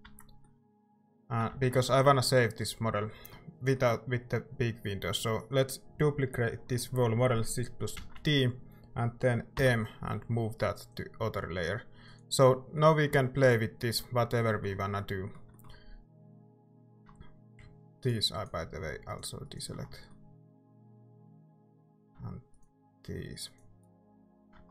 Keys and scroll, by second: 0.1 Tab, 0.6-1.5 typing, 1.8 ctrl+s, 3.0-3.8 typing, 8.0 d, 9.6 m, 13.1 Tab.